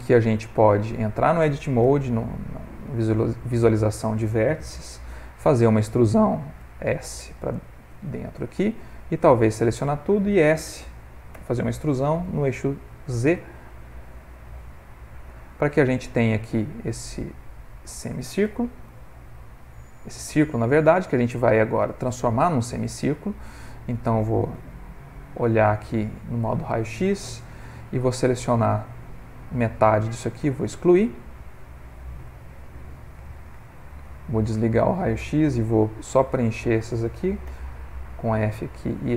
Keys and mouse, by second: 0.0 Tab, 1.8 1, 3.0 middle click, 3.5 middle click, 3.6 middle click, 5.5 e, 8.5 middle click, 9.0 a, 9.4 middle click, 11.3 e, 14.6-16.9 middle click, 16.6 middle click, 16.7 middle click, 18.5 g, 20.1 middle click, 22.1 click, 22.9 ctrl+middle click, 23.3 shift+middle click, 23.7 ctrl+middle click, 24.6 z, 28.1 click, 30.2 x, 31.1 middle click, 32.9 middle click, 33.6 z, 36.3 alt+click, 37.5 f, 37.8 middle click, 38.6 4, 38.8 alt+click.